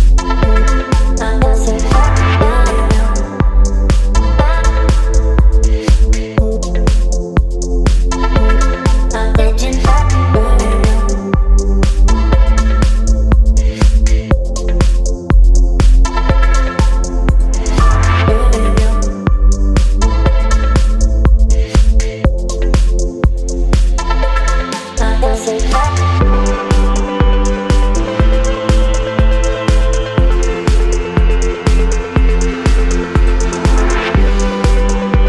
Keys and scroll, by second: 7.5 space, 10.0 b, 11.6 ], 12.4 x, 20.1 v, 26.1 space.